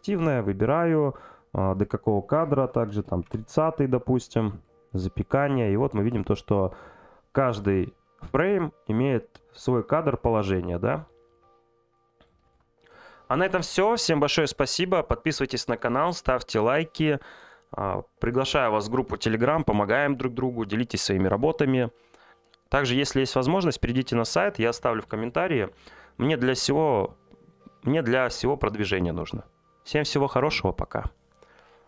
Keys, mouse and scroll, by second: 0.0-5.0 drag, 6.1 click.